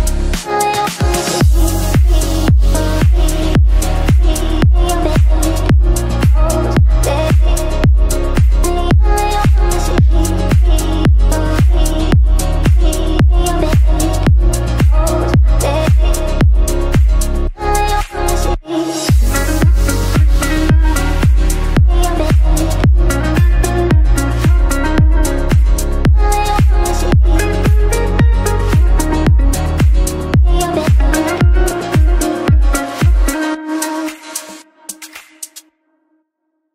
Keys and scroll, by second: 5.6 shift+Page_Down, 5.9 F3, 6.1 Escape, 13.3 shift+F2, 33.3 Escape, 34.2 w, 35.1 d, 36.6 f.